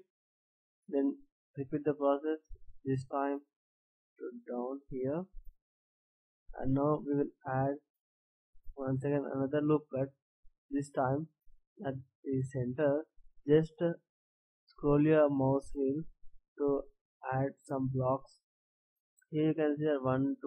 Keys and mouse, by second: 5.6 a, 8.1 ctrl+r, 18.8 a.